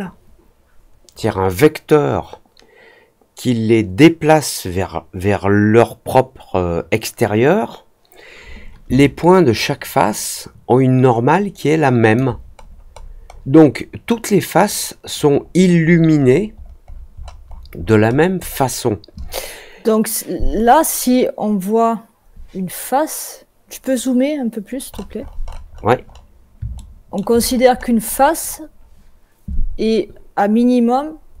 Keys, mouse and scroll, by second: 8.9-12.1 alt+drag, 12.5-13.5 scroll down 3, 15.4-18.5 scroll down 19, 24.8-26.2 scroll up 9, 26.7 alt+middle click, 27.4-27.7 scroll up 2, 27.7 scroll down 1, 28.0-28.6 scroll up 2.